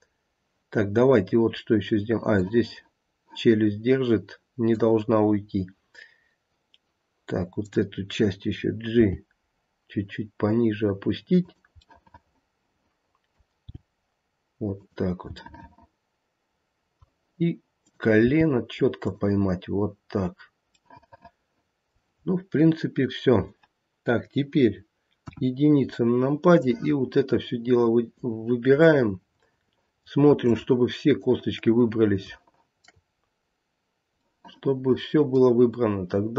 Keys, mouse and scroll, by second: 0.7 scroll up 1, 1.5 scroll down 1, 2.4 middle click, 6.1 scroll down 1, 7.5 click, 8.9 g, 11.9 middle click, 12.4 middle click, 12.8 middle click, 13.7 g, 15.3 middle click, 16.4 middle click, 17.7 click, 18.2 g, 19.4 scroll down 3, 20.7 middle click, 22.2-23.7 scroll up 2, 25.2 KP_1, 25.9-26.4 scroll down 1, 26.6 click, 28.8 middle click, 29.3 middle click, 30.4 shift+click, 32.3 shift+middle click, 33.1-33.4 scroll up 3, 34.3 middle click, 34.7 middle click.